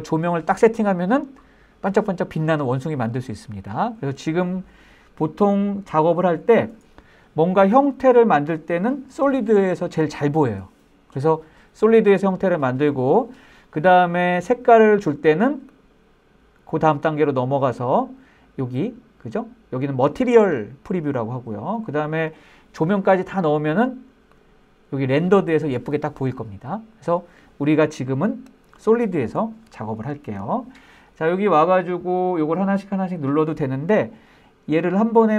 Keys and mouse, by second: 6.8 click, 16.0-21.0 drag, 24.7 click, 28.8 click.